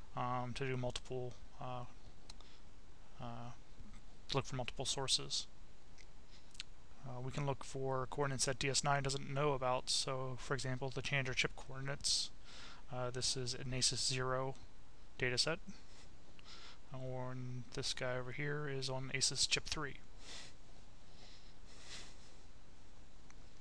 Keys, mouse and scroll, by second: 1.7 click, 2.7 click, 6.0 click, 7.6-9.5 drag, 9.8 click, 10.8 click, 14.5-16.2 drag, 16.9 click, 18.0 click.